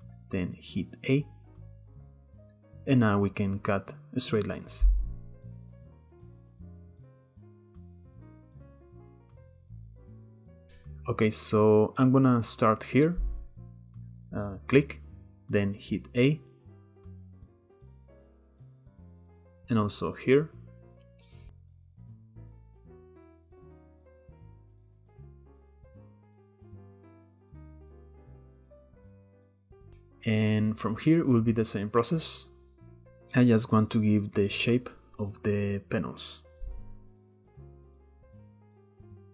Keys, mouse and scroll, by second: 11.1 click, 12.2 k, 18.0-20.2 shift+middle drag, 20.2 k, 28.0-29.1 shift+middle drag, 29.1 k, 37.9-39.3 shift+middle drag.